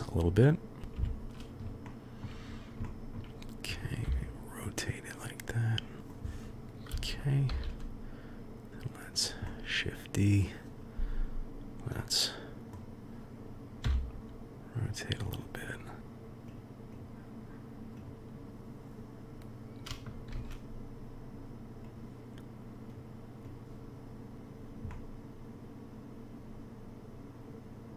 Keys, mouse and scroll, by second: 0.9 KP_3, 1.9-2.3 shift+middle drag, 2.9 shift+middle drag, 4.0 r, 6.0 click, 7.5 shift+d, 9.5-10.6 drag, 12.1-12.7 drag, 13.8 r, 16.5-17.0 drag, 20.3 shift+d, 23.0-24.3 drag, 24.9-27.9 middle drag.